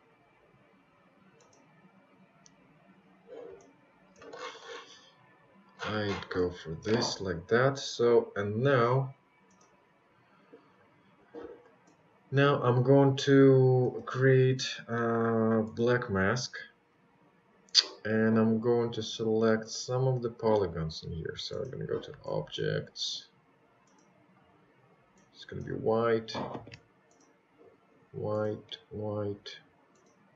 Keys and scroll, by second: 11.0 ctrl+z, 30.1 ctrl+z.